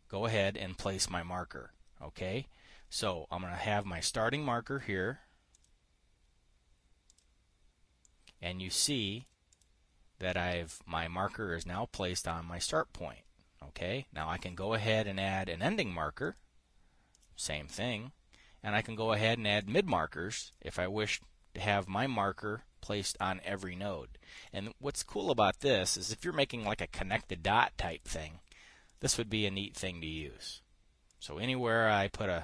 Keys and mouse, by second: 5.2 click, 6.2 click, 8.6-9.9 drag, 10.0 click, 14.9 click, 16.8 click, 17.8 click, 20.1 click, 25.8 click, 26.5 click, 28.4 click, 29.4 click, 30.2 click, 30.8 middle click, 31.6-32.4 drag.